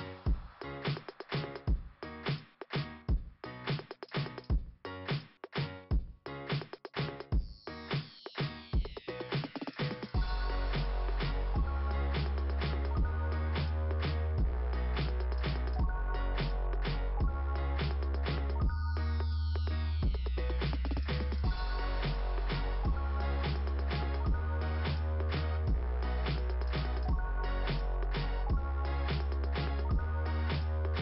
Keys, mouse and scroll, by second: 1.4 click, 2.1 click, 2.4 click, 2.7 click, 5.1 click, 10.1 click, 14.1 click, 18.6-19.0 scroll up 2, 24.0 scroll down 2, 24.7 scroll down 1, 25.5-26.6 scroll down 1, 27.6 click, 27.9 click, 28.3 click, 29.5 click, 30.2 click.